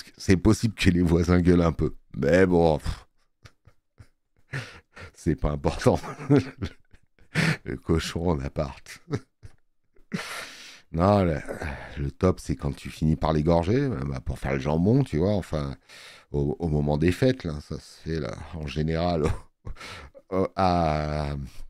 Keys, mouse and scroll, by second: 8.8 space.